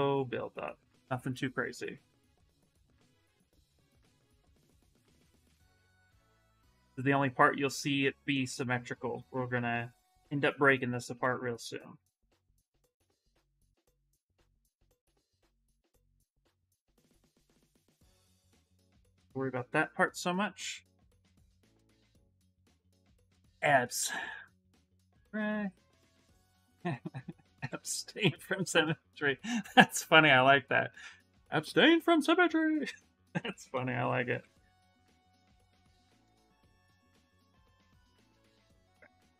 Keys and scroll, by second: 5.5 s, 10.1 space, 33.5 d, 34.1 d.